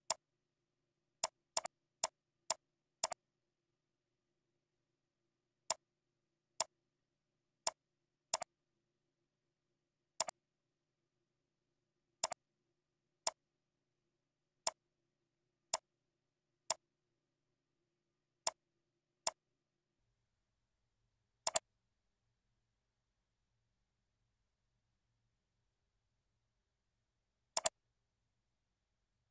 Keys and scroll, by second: 1.9 ctrl+c, 2.1 ctrl+v, 2.4 ctrl+z, 2.9 ctrl+v, 6.4 ctrl+c, 7.2 ctrl+v.